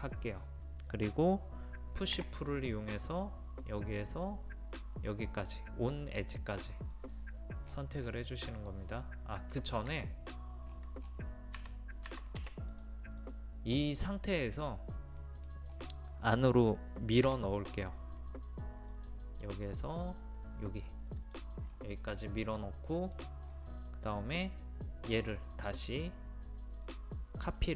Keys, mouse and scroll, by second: 2.2 p, 3.6 click, 7.7-8.0 scroll down 1, 9.9 ctrl+z, 10.7-11.0 scroll down 1, 11.6 scroll down 1, 12.7 click, 14.0-15.2 scroll up 1, 15.2 middle click, 15.7-16.0 scroll up 1, 17.3 m, 18.9 click, 21.6 scroll down 1, 22.1 middle click, 22.5-22.9 scroll down 1, 22.9 middle click, 23.5 scroll up 1, 25.1 ctrl+click.